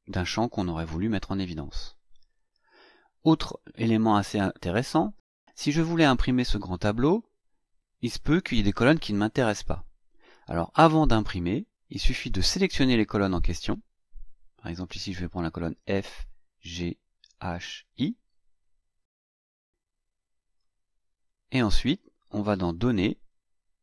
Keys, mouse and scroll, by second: 15.0-20.8 drag, 22.7 click.